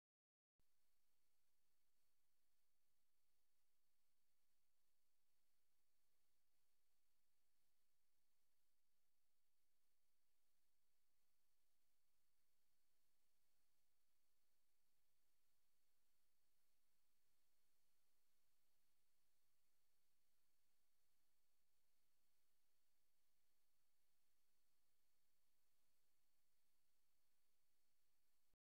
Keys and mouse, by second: 1.1 shift+click, 1.9-3.4 shift+drag, 4.7-10.2 drag, 11.2-13.9 alt+drag, 14.5 ctrl+s, 15.3-15.6 alt+drag, 20.6-28.6 drag.